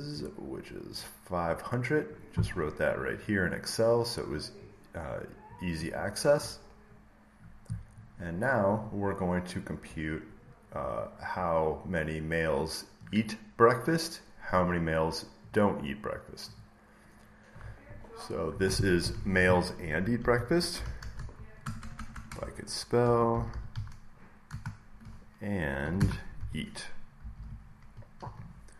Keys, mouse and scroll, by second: 0.9 click, 2.0 click, 3.1 click, 4.5 click, 5.4-7.6 drag, 7.9-10.0 drag, 10.7-12.8 drag, 14.4 click, 15.4 click, 16.5 click, 19.8-24.1 typing, 19.9-21.1 drag, 25.5-27.7 typing, 28.1 Right.